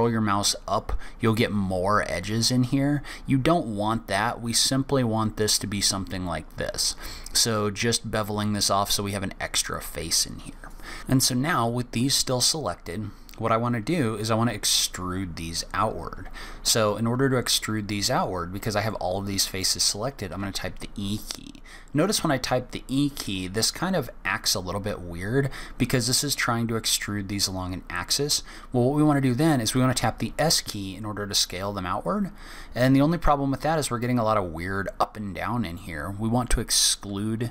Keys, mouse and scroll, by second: 15.0-17.1 scroll up 1, 18.9 middle click, 20.3 e.